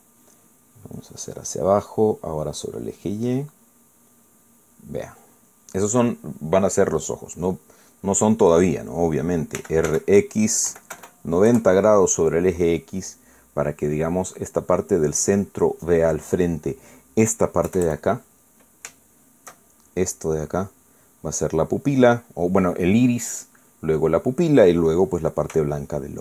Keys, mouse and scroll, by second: 2.0 click, 3.6-5.2 drag, 5.3-6.3 middle drag, 6.5 middle click, 10.6 r, 10.9 x, 11.7 KP_9, 11.9 KP_0, 12.5 KP_Enter, 18.7 KP_Add, 20.0 shift+middle click.